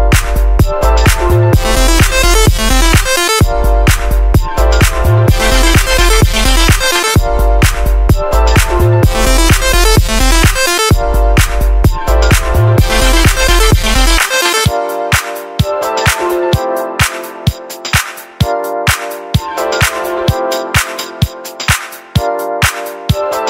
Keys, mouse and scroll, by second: 2.4 super+z.